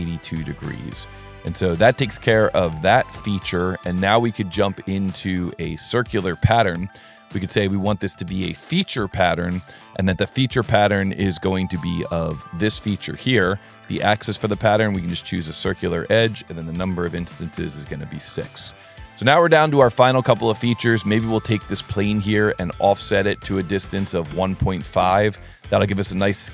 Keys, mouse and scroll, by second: 1.5 click, 2.3 scroll up 1, 3.5 middle click, 5.1 click, 5.9 click, 7.9 click, 9.1 click, 12.3 click, 13.6 click, 14.6 click, 16.1 click, 18.3 scroll up 1, 18.7 middle click, 19.3-19.6 ctrl+middle drag, 20.9 click, 21.2 s, 21.9 click, 23.0 Tab.